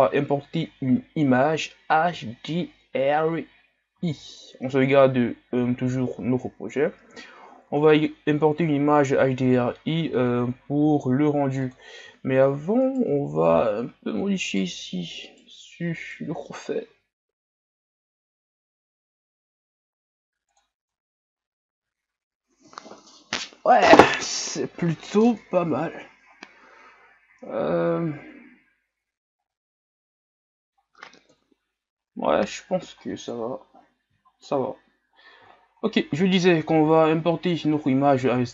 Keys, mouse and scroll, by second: 6.5-7.4 ctrl+scroll down 2, 7.4-7.9 shift+scroll up 1, 7.9-8.4 ctrl+scroll down 1, 8.4 scroll up 1, 9.6 ctrl+scroll up 4, 10.4 shift+scroll down 2, 11.7 click, 12.1 shift+scroll down 3, 12.4 scroll up 3, 12.9 right click, 13.1 Tab, 13.5 scroll up 2, 14.5-15.7 alt+right drag, 16.0-17.0 alt+right drag, 17.0 s, 20.9 Tab, 21.2 scroll down 6, 21.9 scroll down 1, 22.8 scroll up 4, 26.3 scroll up 4, 27.6-28.1 shift+scroll down 13, 29.6-31.3 middle drag, 31.3 KP_1, 32.0 scroll down 1, 32.4 shift+scroll up 9, 33.0 scroll down 3, 33.5 shift+scroll up 4, 34.3 shift+scroll up 5, 35.6 shift+scroll down 1, 36.6 shift+scroll down 5.